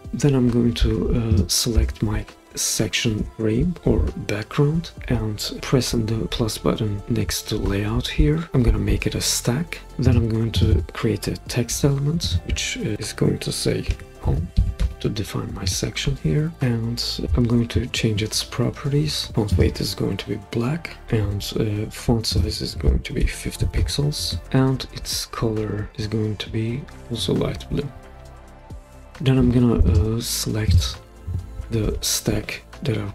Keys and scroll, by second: 11.7 t, 14.0-15.3 typing, 23.3-25.1 typing.